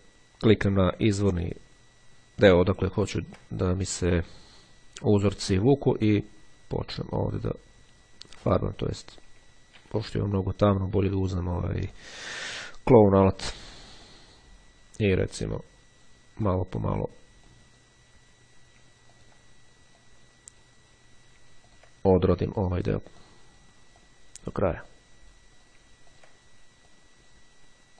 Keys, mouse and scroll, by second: 1.3 ctrl+click, 6.3-8.9 drag, 9.8 ctrl+z, 11.9 click, 13.4 ctrl+click, 14.2-16.7 drag, 16.9 click, 19.3 ctrl+click, 20.1-21.2 drag, 21.8 ctrl+click, 23.3 click, 25.0 click, 26.2 ctrl+click, 27.0 click.